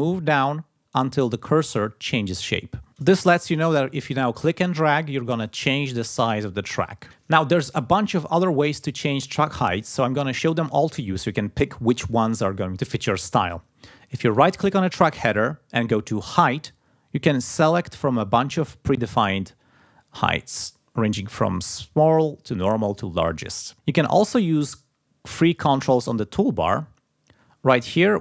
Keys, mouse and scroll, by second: 4.1-7.0 drag, 14.2 right click, 18.1 click, 18.6 right click, 20.4 click, 21.5 right click, 23.2 click.